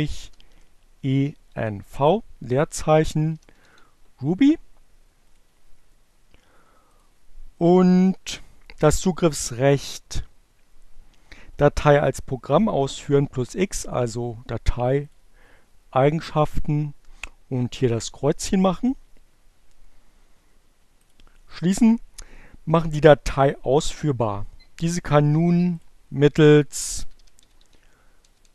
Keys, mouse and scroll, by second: 0.0-3.8 typing, 4.9 click, 6.7 click, 12.3-13.8 right drag, 14.8 click, 16.2 click, 17.2 click, 20.2 click, 25.4 click, 25.7-27.8 typing.